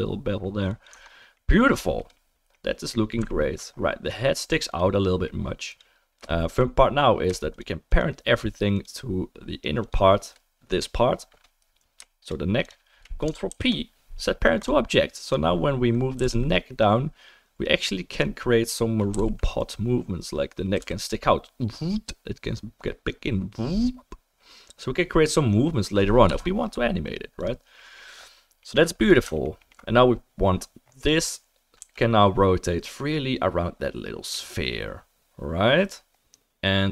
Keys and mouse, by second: 0.9 right drag, 0.9 Tab, 0.9-3.2 middle drag, 3.2 alt+right click, 3.4 alt+middle click, 3.5-5.0 alt+right drag, 4.7 click, 5.0-5.7 middle drag, 5.7 click, 7.5 shift+click, 8.7 shift+click, 9.8-29.4 shift+drag, 13.5 ctrl+p, 15.2 middle click, 15.2 right click, 16.2 g, 19.1 g, 20.7 g, 29.4 alt+right click, 29.6 alt+click, 29.6-36.9 alt+right drag, 31.8 r.